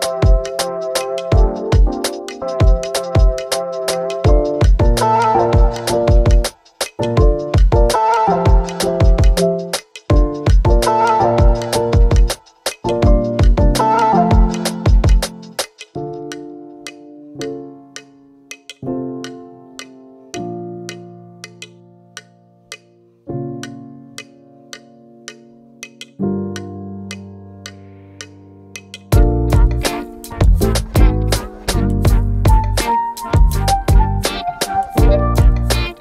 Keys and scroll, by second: 1.9 space, 2.3 w, 4.7 Escape, 7.8 w, 14.3 Escape.